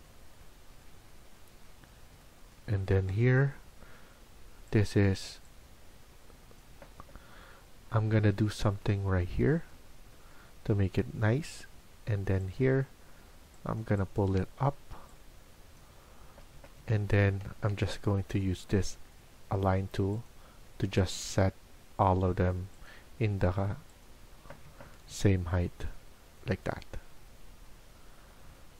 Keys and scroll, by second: 6.6 Escape, 6.9 Escape, 16.1 Escape, 16.4 Escape, 16.7 Escape, 17.6-18.3 typing.